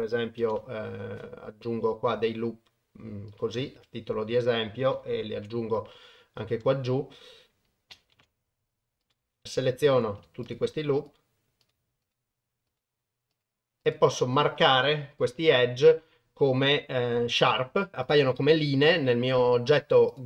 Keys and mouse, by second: 0.4 ctrl+r, 5.4 ctrl+r, 8.1 ctrl+r, 9.4 alt+2, 11.1 alt+shift+click, 11.6 alt+shift+click, 12.0 alt+shift+click, 12.7 alt+shift+click, 13.3 alt+shift+click, 13.8 alt+shift+click, 14.3 alt+shift+click, 15.2-17.9 right drag, 18.0 click, 20.1 click.